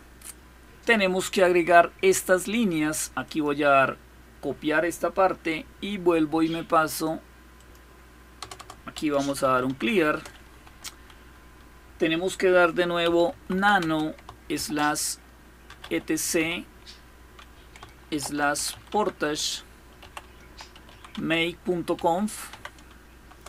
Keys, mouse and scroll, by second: 0.0-0.4 scroll down 2, 3.0 click, 6.6 click, 7.3 click, 8.2 Return, 8.4 Return, 8.4-10.2 typing, 12.5-16.2 typing, 17.6-23.1 typing.